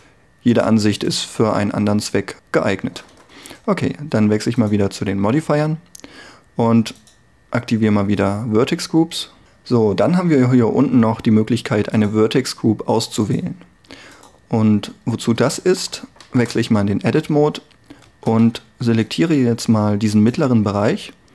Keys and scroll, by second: 16.4 Tab, 18.1 a, 18.5 g.